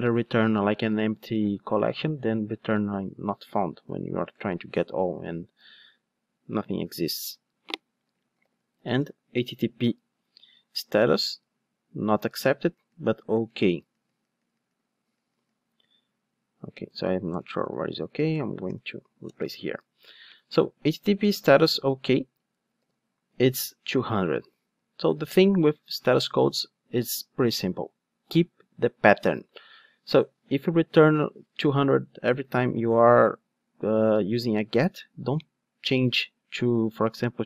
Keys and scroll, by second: 16.9 Return, 22.8 super+b.